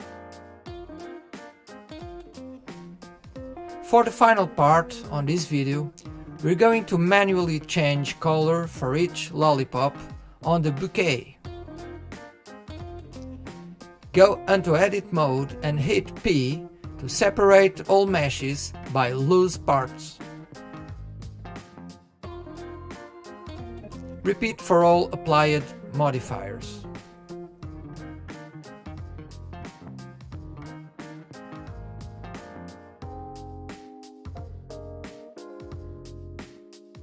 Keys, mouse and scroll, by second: 3.8 click, 5.0 g, 5.9-10.1 middle drag, 10.1 click, 10.9 click, 12.5-14.9 middle drag, 14.9-20.1 drag, 20.1 p, 32.1-32.5 drag, 33.3 click, 33.9 click, 34.3 click, 35.5-36.7 drag, 36.7 p.